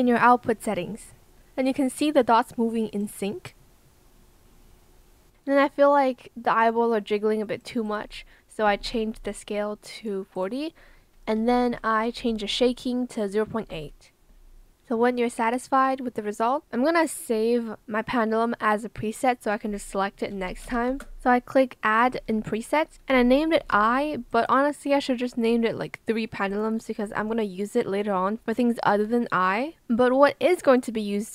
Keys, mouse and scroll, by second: 8.6 KP_4, 8.7 KP_0, 8.9 Return, 11.3 KP_0, 11.6 KP_3, 12.1 BackSpace, 12.4 KP_Decimal, 13.5 KP_8, 13.7 Return, 20.2-22.1 typing, 23.5 BackSpace.